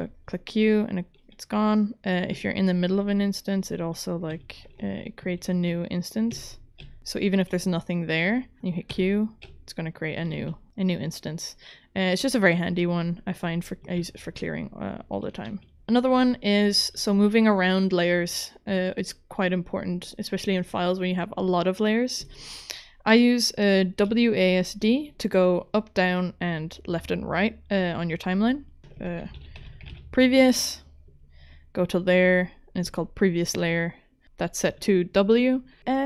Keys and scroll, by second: 4.3 q, 4.8 ctrl+z, 5.3 ctrl+z, 6.3 q, 8.9 q, 9.4 w, 14.0 v, 15.5 q, 28.8-30.4 typing.